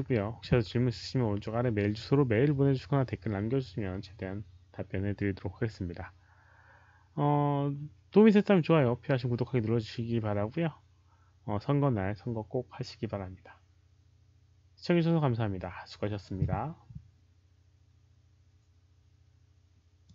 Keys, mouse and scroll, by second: 20.0 click.